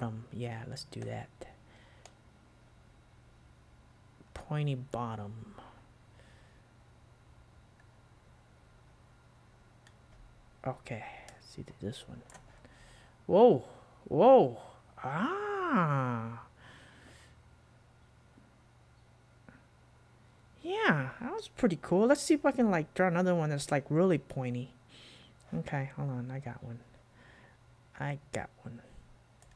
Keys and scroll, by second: 12.4 super+q.